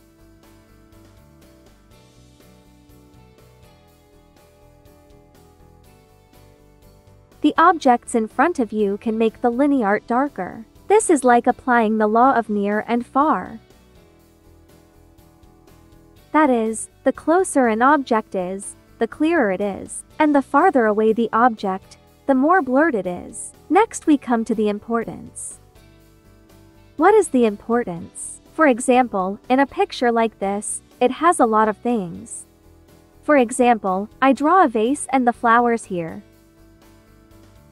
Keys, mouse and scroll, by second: 0.5-4.3 ctrl+drag, 4.7 ctrl+z, 4.8 ctrl+click, 5.9 ctrl+z, 6.0 ctrl+click, 9.9 click, 10.1 ctrl+z, 10.7-17.6 drag, 23.7 space, 23.9-37.7 drag.